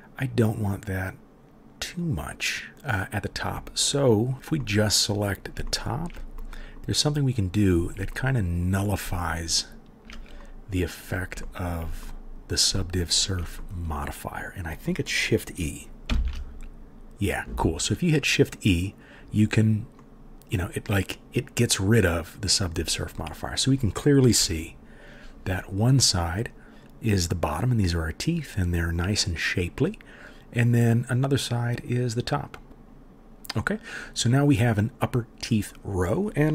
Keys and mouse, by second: 4.3-36.5 drag, 9.6 shift+middle click, 9.6 shift+right click, 16.1 shift+e, 24.4 KP_1.